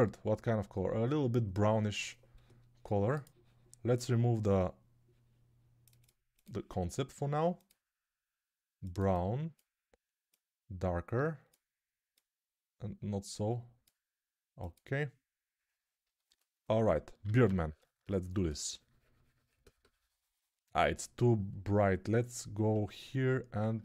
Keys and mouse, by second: 2.4-16.8 drag, 17.1 alt+q.